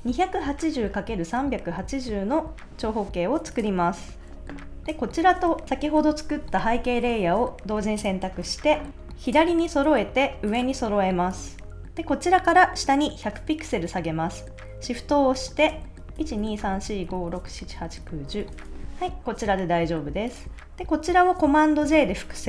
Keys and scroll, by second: 16.1 shift+Down, 21.8 super+j.